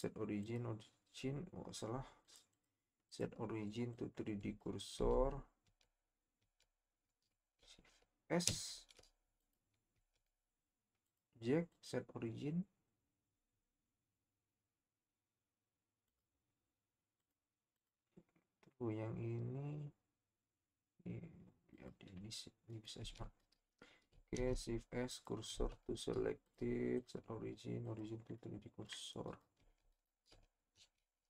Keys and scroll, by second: 5.2 Tab, 5.7 Tab, 6.4 Tab, 8.5 shift+s, 9.9 Tab, 23.2 Tab, 24.3 shift+s, 25.5 Tab, 29.8 Tab, 30.8 shift+s.